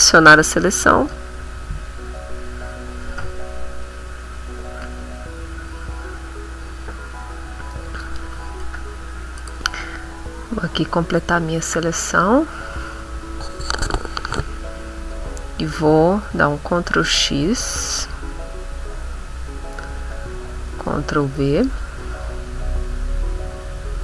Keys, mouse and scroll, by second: 0.6-7.9 drag, 9.4 right click, 10.5-12.2 drag, 11.1-12.2 middle drag, 15.0 middle click, 15.6 middle click, 16.7 ctrl+x, 20.7 ctrl+v.